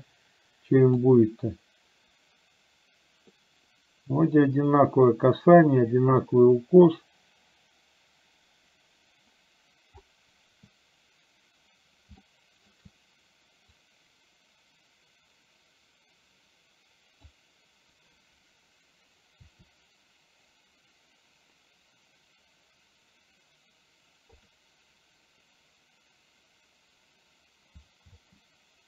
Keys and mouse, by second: 12.4 shift+middle click, 13.9-17.4 drag, 19.5 r, 28.3 space.